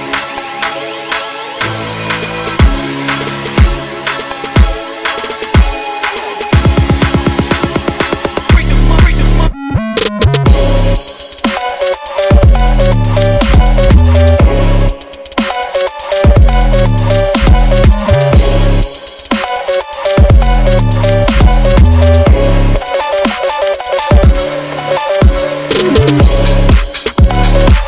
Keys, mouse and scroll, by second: 0.5 scroll up 1, 0.7 click, 1.1 click, 1.8-2.3 scroll up 1, 2.3 scroll up 1, 3.1 click, 4.5 click, 6.4 click, 9.2 click, 11.6 click, 12.5-14.5 shift+drag, 15.4 click, 16.1 click, 16.5 click, 17.1 click, 17.7-18.8 drag, 19.8 click, 21.2 ctrl+s, 21.8 click, 22.0-22.7 scroll up 3, 22.2 Tab, 22.8-24.2 shift+drag, 24.5 click, 25.5 click, 26.2-27.8 drag.